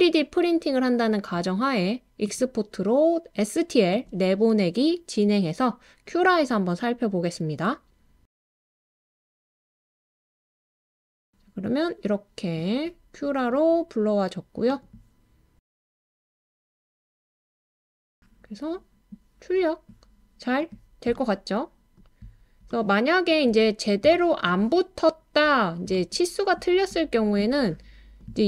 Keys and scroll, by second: 9.8 typing, 11.3 typing.